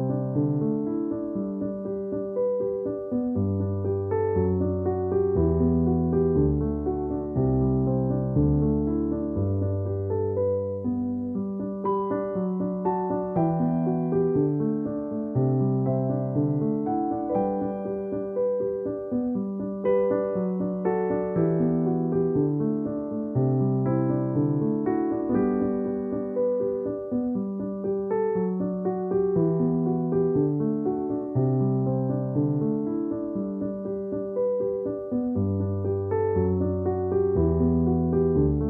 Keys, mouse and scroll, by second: 0.5 alt+click, 1.7 alt+click, 4.2 alt+click, 4.4 alt+click, 6.7 space, 6.8 click, 6.9 click, 7.0 space, 7.5 alt+click, 9.4 alt+click, 9.5 alt+click, 14.6 alt+click, 14.9 alt+click, 16.4 alt+click, 18.2 alt+click, 20.0 space, 20.2 click, 20.3 space, 20.8 alt+click, 23.8 alt+click, 24.0 alt+click, 25.7 alt+click, 30.1 space, 30.2 click, 30.4 space, 31.6 alt+click, 32.0-32.4 typing, 33.2 alt+click, 36.7 alt+click, 36.9 alt+click.